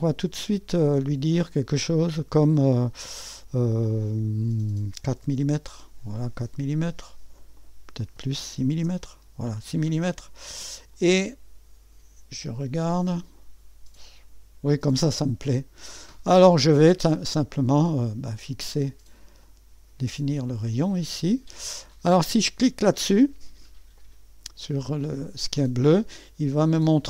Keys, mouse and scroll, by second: 4.7-5.7 typing, 7.4-8.6 drag, 8.4-9.1 typing, 10.9-14.8 drag, 11.4-12.1 typing, 17.5 click, 19.4 click, 21.0 click, 24.0 click.